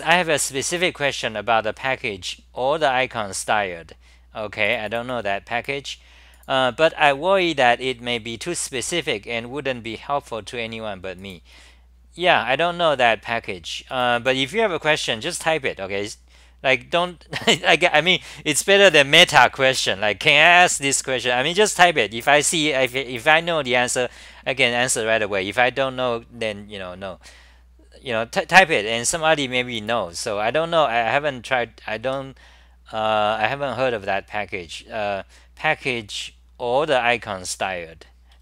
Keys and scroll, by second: 32.0 w, 38.3 d.